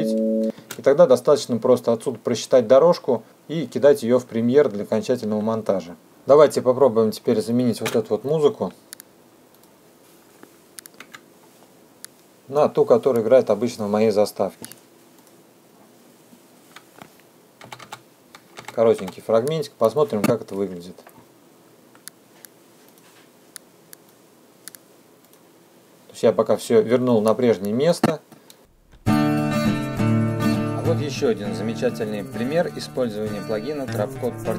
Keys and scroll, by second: 0.4 space, 6.0 F2, 7.3 Delete, 18.0 =, 29.2 space.